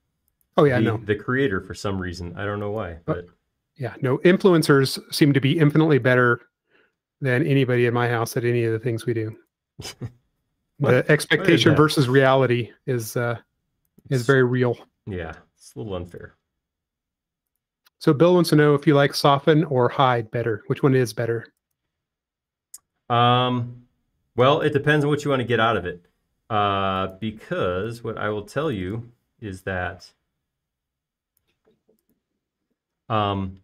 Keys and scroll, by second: 8.1 space, 10.0-11.0 typing, 16.4 m, 30.7 p, 33.1 space.